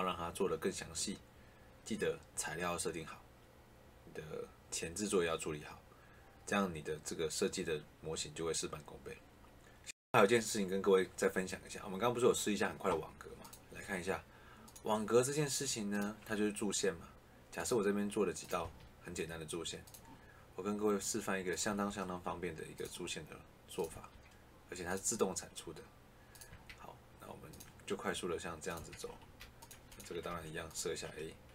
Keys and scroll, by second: 18.5 Escape, 21.6 Escape, 23.8 Escape, 26.4 Escape, 28.7 Escape, 30.1 a.